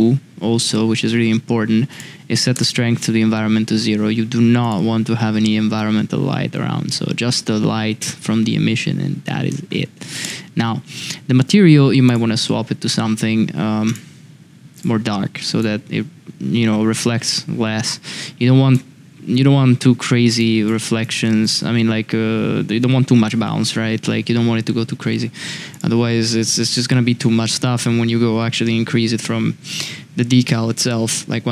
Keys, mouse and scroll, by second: 0.6 click, 1.9-3.2 drag, 12.0 click, 13.8 click, 14.7 click, 20.4 drag, 21.1 click, 25.7 click.